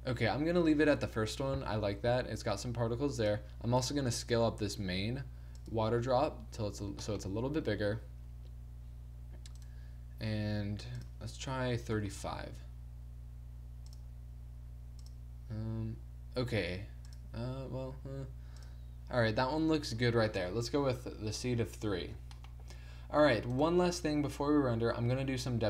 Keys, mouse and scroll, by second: 1.3 middle click, 1.8-3.2 middle drag, 3.2 click, 3.5 click, 4.3 s, 5.5 click, 6.3 a, 9.6-11.0 right drag, 19.4 click, 22.3 middle click, 23.5-25.4 right drag.